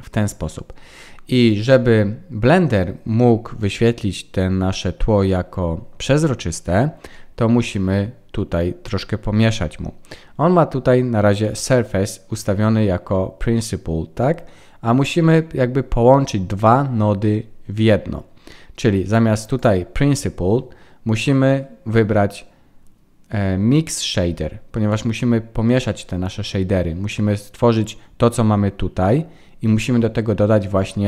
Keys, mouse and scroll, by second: 0.8-1.3 scroll up 7, 1.3-2.6 scroll down 2, 2.6-3.0 scroll down 3, 6.4-8.0 scroll up 18, 19.6 click.